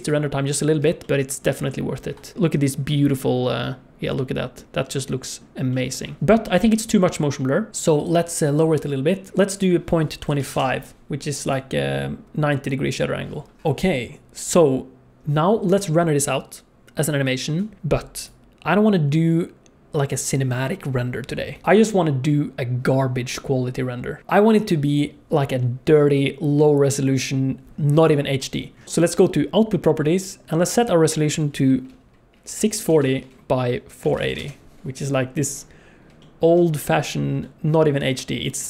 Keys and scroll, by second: 2.3 F11.